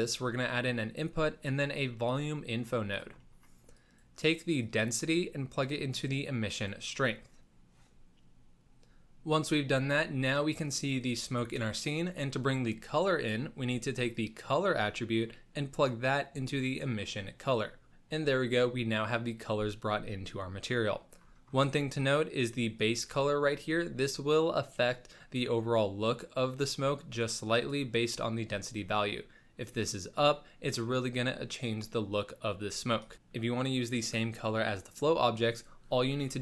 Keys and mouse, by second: 3.8 click, 4.6-6.7 drag, 14.1-16.8 drag, 20.7 click, 20.7 middle click, 22.1 click, 22.1 middle click, 22.7 click, 23.5 click, 28.8 click, 30.1 click, 35.5 click.